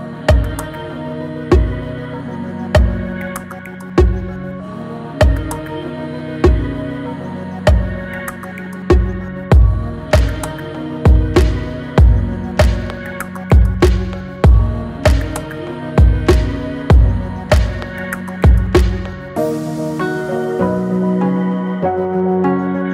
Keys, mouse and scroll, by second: 1.0 Tab, 1.7-4.4 right drag, 4.4-5.1 scroll down 10, 7.0-8.7 drag, 8.7 scroll up 1, 9.3 scroll up 2, 9.3-10.5 middle drag, 10.5 scroll up 1, 11.2-11.7 middle drag, 11.7 scroll up 1, 12.0-15.9 shift+middle drag, 17.2-18.8 drag, 18.8-19.3 scroll down 2, 19.3 click, 19.8-20.6 middle drag, 20.6-21.0 scroll down 1, 21.0-22.7 middle drag, 22.7-22.9 scroll down 2.